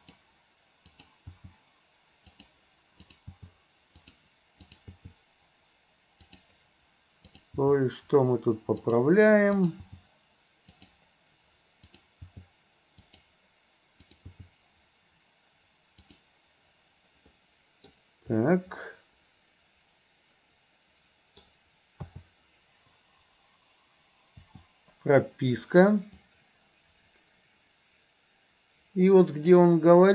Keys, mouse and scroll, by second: 1.4 g, 3.4 g, 4.7 click, 5.0 g, 7.3 click, 7.7 g, 9.5 click, 9.9 g, 11.9 click, 12.3 g, 14.3 g, 17.4-18.0 middle drag, 18.8 scroll up 1, 19.0-21.5 middle drag, 22.1 a, 24.5 i, 26.3-29.6 drag.